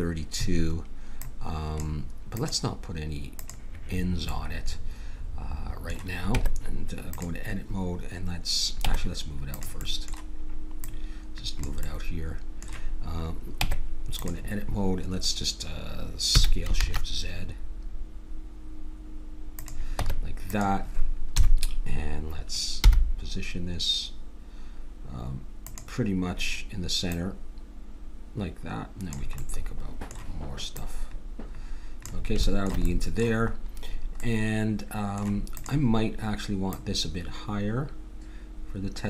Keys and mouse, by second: 1.2-4.3 drag, 4.3-6.3 middle drag, 6.3 Tab, 8.8 Tab, 10.8-12.7 drag, 13.6 Tab, 16.3 s, 20.0 Tab, 21.3 KP_7, 22.8 g, 27.1-29.1 drag, 29.4-30.7 middle drag, 30.7-32.9 drag, 35.2 middle click, 35.5-38.5 drag.